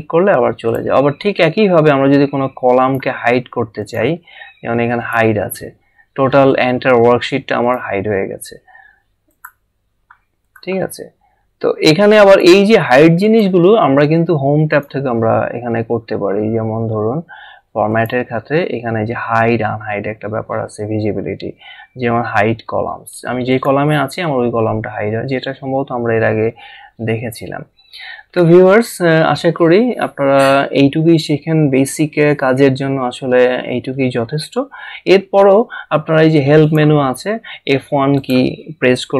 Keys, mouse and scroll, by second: 0.7 click, 2.8 click, 7.6 click, 9.4 click, 12.2 click, 17.9 click, 23.5 click, 36.6 click, 38.1 click.